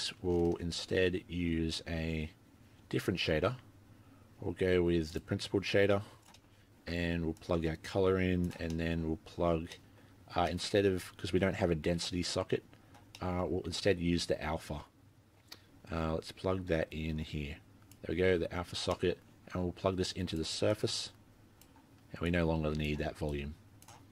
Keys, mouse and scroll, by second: 0.0-0.3 scroll down 1, 0.6 shift+a, 6.4 middle click, 6.5-7.4 scroll down 1, 7.4 click, 7.4-8.1 scroll down 3, 8.7 middle click, 9.7 middle click, 10.7 middle click, 13.2 middle click, 14.2 click, 18.9 middle click, 20.2 click, 20.7 click, 22.3 click, 23.3 click, 24.0-24.1 scroll down 4.